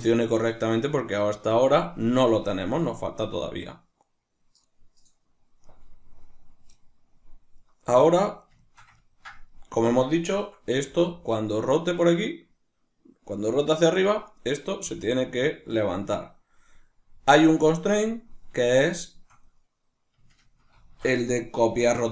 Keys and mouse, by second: 7.2 right click, 8.2-9.4 shift+middle drag, 9.4 right click, 10.4 r, 14.2 right click, 14.5 r, 15.5 right click, 17.6 right click, 18.5 shift+right click, 20.3 ctrl+shift+c.